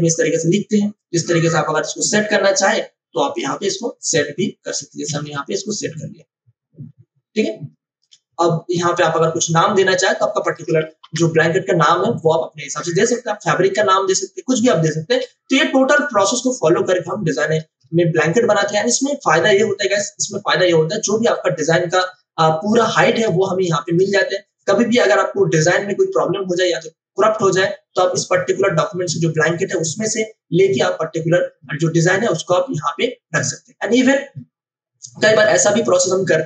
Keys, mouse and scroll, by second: 5.0 ctrl+t, 5.6-11.0 drag, 11.0 Return, 15.2 space, 15.5 click, 15.7 space, 17.0 click, 17.1 space, 20.0 scroll down 1, 21.3-22.6 drag.